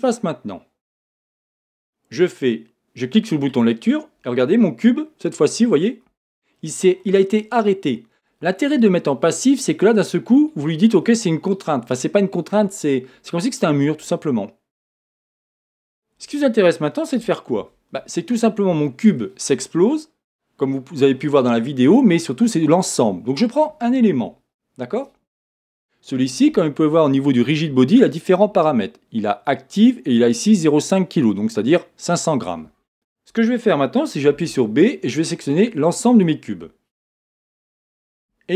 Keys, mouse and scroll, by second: 0.0-1.0 drag, 3.5-6.0 drag, 6.0 middle click, 6.6-13.7 middle drag, 17.6 z, 18.3 middle click, 23.4 click, 24.5 scroll up 2, 32.9 click, 34.3 b.